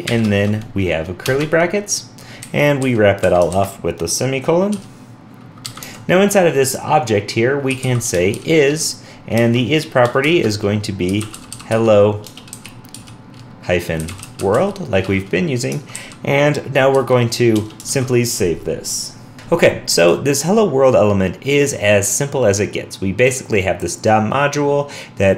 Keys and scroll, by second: 17.9 super+s, 19.3 super+w.